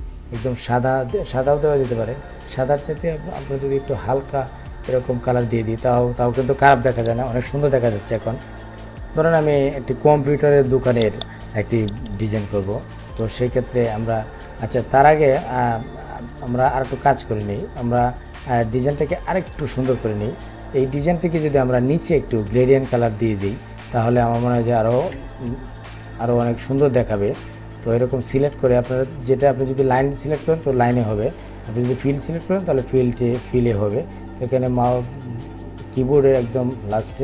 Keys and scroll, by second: 34.2 <.